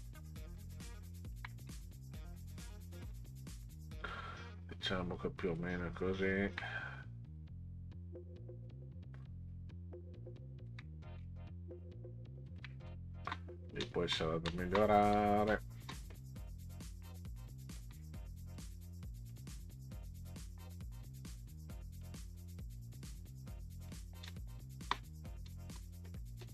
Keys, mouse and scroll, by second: 1.2 ctrl+click, 1.8-2.3 ctrl+scroll up 6, 3.5 ctrl+click, 5.5 ctrl+click, 7.3 click, 9.1 click, 10.5 ctrl+click, 12.5 ctrl+click, 12.9 space, 13.8 space, 14.5 space, 15.5 space, 17.8 ctrl+click, 18.6 click, 19.3 click, 22.0 click, 23.9 click, 24.3 space, 25.5 space, 26.4 space.